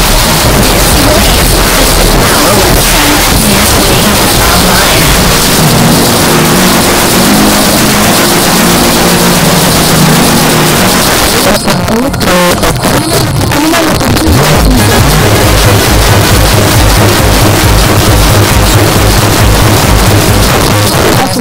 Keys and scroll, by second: 10.8 Page_Down, 20.5 Page_Down.